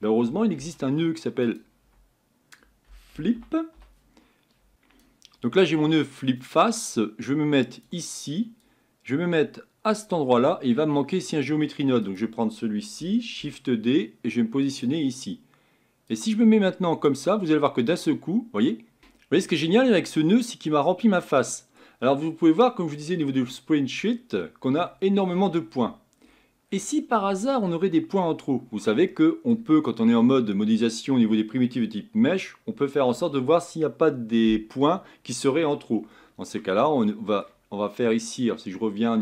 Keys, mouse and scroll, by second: 4.7 ctrl+z, 10.0 click, 13.4 shift+d, 17.0 click, 17.4-19.0 middle drag, 19.0 ctrl+z, 21.2-35.4 middle drag, 35.4-36.1 scroll down 4, 36.1-39.2 shift+middle drag.